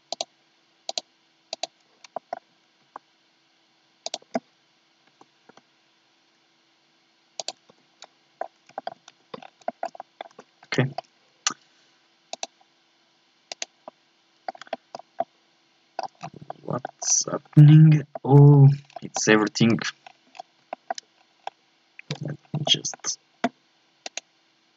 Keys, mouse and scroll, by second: 0.2-2.0 drag, 2.0 scroll down 1, 2.1 shift+middle click, 2.8 s, 5.1 s, 7.7 Tab, 8.0-9.1 middle drag, 9.1 Tab, 9.4 scroll up 5, 9.6 shift+middle click, 10.3 Tab, 10.6 scroll up 1, 10.8-12.3 shift+middle drag, 12.3-13.5 drag, 13.5 right click, 13.8-16.2 middle drag, 16.2 scroll down 6, 16.5 shift+middle click, 17.0 scroll down 1, 17.3 KP_1, 17.6 scroll up 1, 18.1 shift+middle click, 18.5-18.9 scroll up 1, 18.9 scroll down 1, 19.1 shift+middle click, 19.7 Tab, 20.0 scroll up 1, 20.3 scroll down 3, 20.7 shift+middle click, 21.1 scroll down 1, 21.4 scroll up 2, 22.1 z, 22.4 scroll up 2, 22.7-24.0 shift+middle drag, 24.0-24.7 right drag.